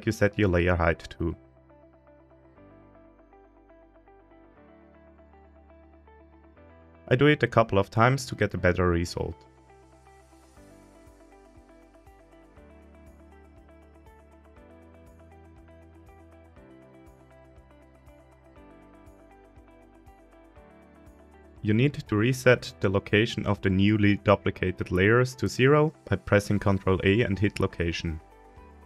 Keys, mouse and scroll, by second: 0.5 shift+d, 2.1 Escape, 6.3-8.1 drag, 11.1 shift+r, 12.6 g, 14.2 click, 16.1-17.3 drag, 18.1 shift+d, 18.5 Escape, 19.0 click, 20.1 right click, 20.7 scroll down 1, 20.9 middle click, 21.6 scroll up 1, 21.7-22.3 scroll down 2, 22.2-23.6 middle drag, 23.9 scroll down 1, 23.9-24.8 middle drag, 26.5 shift+a, 27.5 ctrl+a.